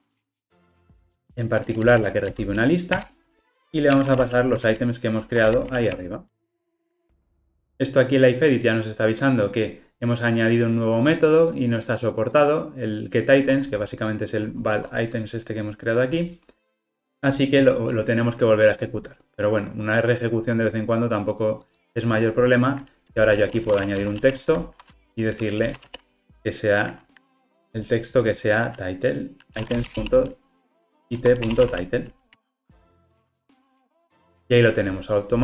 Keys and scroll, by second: 3.0 Return, 17.6 ctrl+r, 32.4 Return.